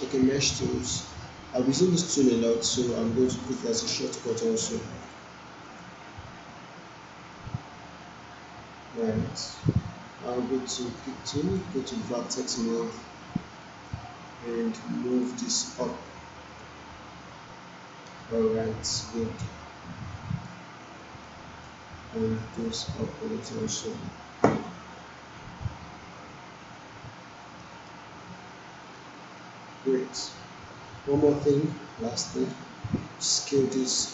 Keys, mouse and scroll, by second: 3.3 ctrl+Num_Lock, 3.3 click, 4.1 ctrl+shift+right click, 5.0-9.2 drag, 10.8 click, 11.5-12.8 right drag, 13.6-20.6 drag, 21.2-21.9 click, 22.4-23.6 drag, 27.4 click, 27.9-29.1 alt+middle drag, 31.7-32.6 alt+drag.